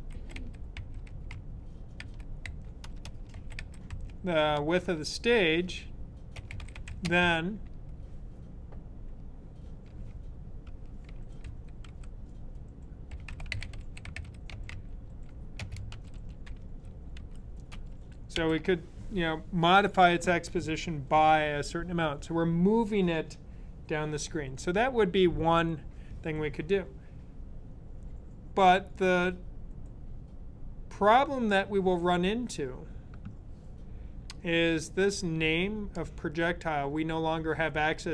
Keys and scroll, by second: 0.0-4.2 typing, 6.2-7.3 typing, 10.5-18.1 typing.